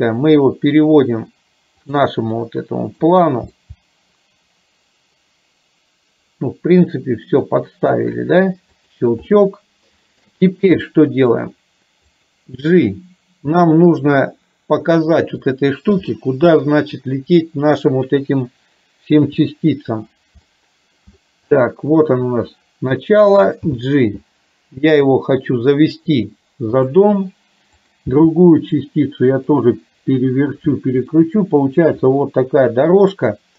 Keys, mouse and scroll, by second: 2.5 middle click, 3.5 g, 9.4 shift+middle click, 10.9 middle click, 12.3 click, 16.2-17.9 middle drag, 19.4 KP_7, 20.6 shift+middle click, 21.8 shift+middle click, 23.6 g, 27.9 click, 28.3 g, 31.2 shift+middle click.